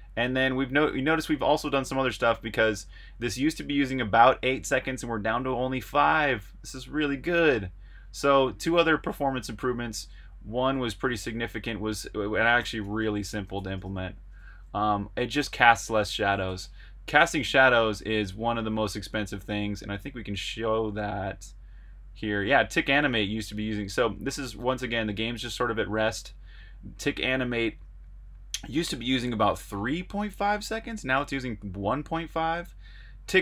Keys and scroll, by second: 9.1 super+Tab, 12.3-14.3 typing, 15.9 k, 16.5 super+Tab, 18.3 super+Tab.